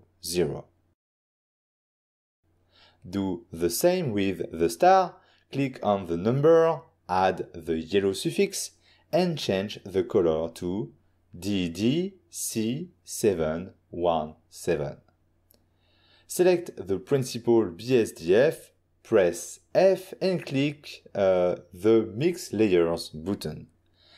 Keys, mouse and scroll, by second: 2.3 Return, 4.0 click, 5.4 click, 6.3 click, 6.4 click, 7.2 click, 7.4 click, 7.7 click, 7.7 click, 8.1 click, 8.4-8.9 typing, 9.2 Return, 10.4 click, 11.4 click, 11.9-14.5 typing, 15.1 Return, 17.4 ctrl+middle click, 18.1 click, 19.7 click, 19.7 click, 19.9 click, 20.2-20.7 typing, 20.9 Return, 22.1 click, 22.4 click, 22.5 ctrl+middle click, 23.4 click, 23.6 click, 23.8 click.